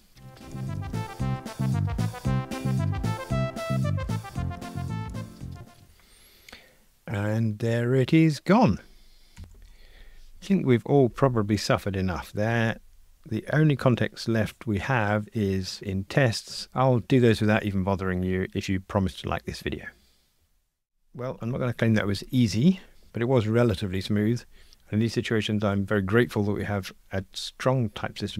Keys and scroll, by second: 0.5 alt+Down, 0.9 Escape, 1.1 alt+shift+Left, 1.2 Escape, 1.3 super+F9, 1.9 Escape, 2.0 alt+shift+Right, 2.1 Delete, 2.3 shift+F6, 2.6 super+F9, 3.0 Return, 3.2 alt+shift+Right, 3.3 Delete, 3.4 alt+shift+Right, 3.5 Delete, 3.9 Return, 4.0 super+F9, 4.2 alt+shift+Right, 4.3 Delete, 4.5 Return, 4.6 super+F9, 4.8 alt+shift+Right, 4.9 Delete, 5.1 Delete, 5.4 Return, 5.4 super+F9, 5.5 ctrl+r, 12.5 shift+super+f.